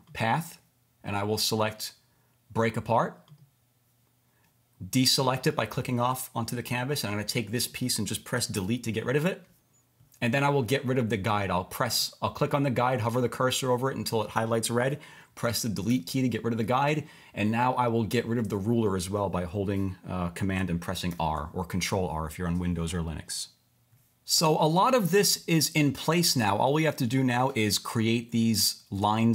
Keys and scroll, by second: 8.5 Delete, 15.9 BackSpace, 21.1 super+r.